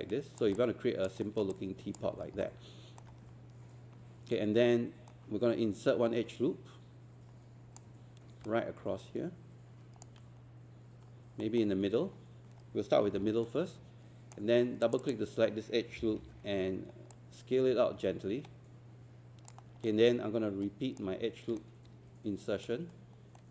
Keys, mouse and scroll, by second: 0.6 alt+click, 1.2 alt+middle click, 1.5 alt+click, 2.1 scroll up 1, 2.4 alt+middle click, 5.1-7.8 right drag, 11.4 ctrl+middle click, 13.1 w, 13.5-14.8 right drag, 14.9 click, 17.1-19.8 drag, 21.7 shift+right click, 23.4 ctrl+middle click.